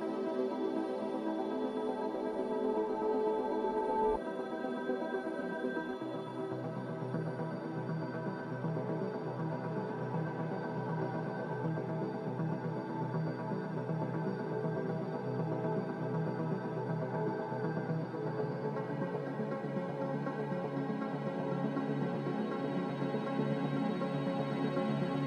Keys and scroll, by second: 12.7-13.5 typing, 16.4-17.1 typing, 23.1-24.0 typing.